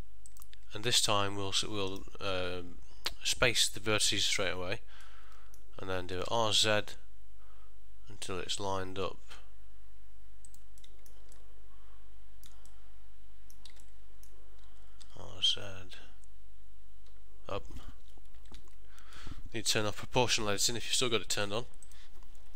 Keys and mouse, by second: 2.0 right click, 5.1 middle click, 6.4 r, 10.9 middle click, 11.4 ctrl+middle click, 12.8 middle click, 13.9 shift+middle click, 15.2 r, 18.7 ctrl+z, 21.9 click.